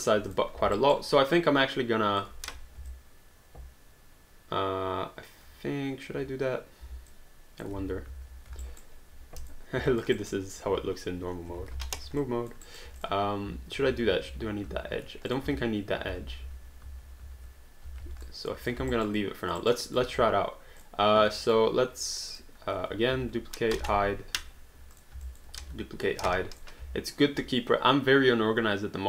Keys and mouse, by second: 0.3 click, 0.8 alt+right click, 1.1 alt+click, 2.5 1, 2.9 alt+click, 7.1 alt+click, 7.8 ctrl+z, 8.6 alt+right click, 9.4 click, 9.9 alt+click, 10.2 alt+right click, 11.5 3, 11.9 alt+d, 12.2 alt+click, 12.6 alt+right click, 13.0 click, 13.8 ctrl+z, 15.3 click, 16.2 ctrl+z, 18.0 alt+d, 18.2 alt+click, 18.7 click, 19.0 alt+right click, 19.6 alt+right click, 19.8 alt+click, 20.1 q, 20.8 click, 21.5 shift+click, 22.3 click, 23.1 ctrl+d, 23.8 h, 24.9 click, 25.2 alt+click, 25.6 ctrl+d, 26.3 h, 26.5 click.